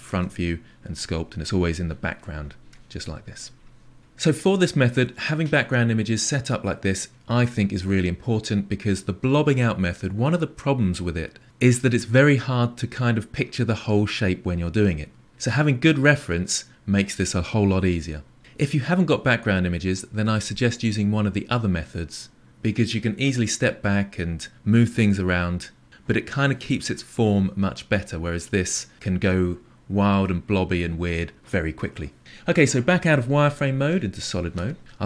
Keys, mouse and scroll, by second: 0.2 KP_1, 2.2-4.0 middle drag, 34.2-35.0 drag.